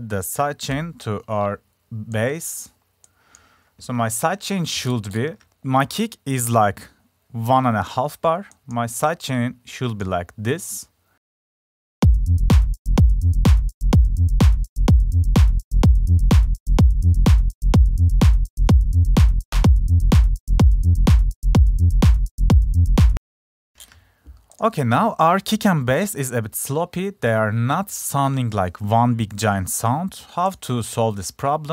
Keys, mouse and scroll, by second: 0.6 click, 1.1 click, 15.0 click, 15.4 click, 16.5 click, 17.6 click, 19.0 click, 19.4 click, 20.1 click, 20.3 click, 21.4 click, 24.0 F1, 24.0 click, 27.1-30.6 drag, 30.6-31.7 right drag.